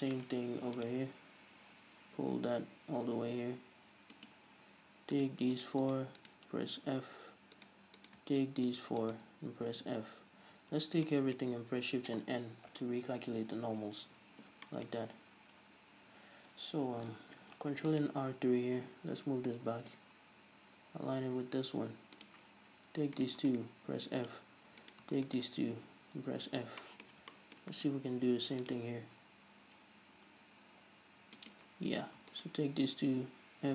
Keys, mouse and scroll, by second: 0.8 ctrl+r, 4.5 click, 5.4-6.5 right drag, 7.2 f, 7.8 right click, 8.2 right click, 8.6 shift+right click, 9.3 shift+right click, 10.1 f, 10.2 scroll down 2, 10.5 a, 11.3-22.5 shift+middle drag, 13.1 shift+n, 13.7 Tab, 15.2-17.6 scroll up 2, 17.6 ctrl+r, 22.5 click, 23.4 right click, 24.5 f, 25.1 right click, 25.5 shift+right click, 26.6 f, 26.8 scroll down 2, 27.1-31.8 shift+middle drag, 28.4 ctrl+r, 31.8 click, 32.2 right click, 33.4 f.